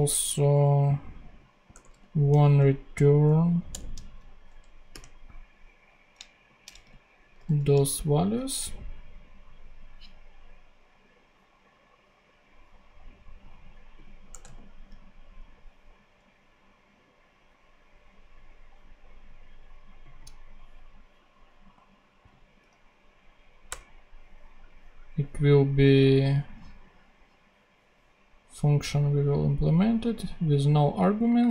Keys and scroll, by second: 1.6 Return, 2.2 alt+super+v, 2.4 alt+super+Left, 2.9 alt+Right, 3.6 Return, 3.9 super+Right, 4.8 super+,, 6.7 shift+c, 7.3 shift+super+c, 7.4 super+z, 8.1 ctrl+super+c, 9.0 ctrl+Tab, 14.2 Return, 14.4 super+v, 23.6 BackSpace.